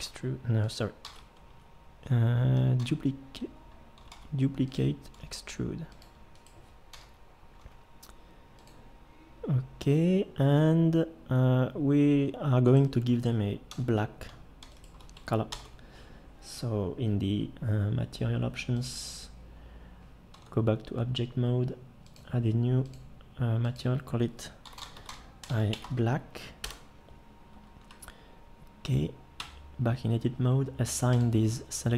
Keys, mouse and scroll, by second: 0.0 e, 1.1 ctrl+z, 2.8 d, 4.1 shift+d, 5.2 e, 6.9 l, 7.6 g, 13.7 l, 15.5 ctrl+l, 20.4 Tab, 29.4 Tab.